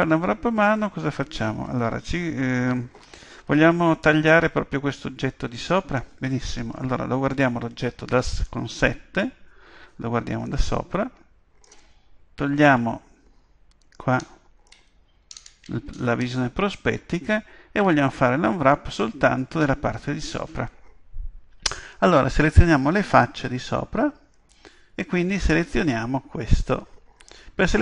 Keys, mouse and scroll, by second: 8.2 KP_7, 10.5-12.4 middle drag, 12.6 KP_5, 14.2-16.0 middle drag, 16.0-17.8 scroll up 1, 17.8 scroll up 1, 18.0-23.2 middle drag, 23.2-24.9 drag, 25.3-27.2 right drag.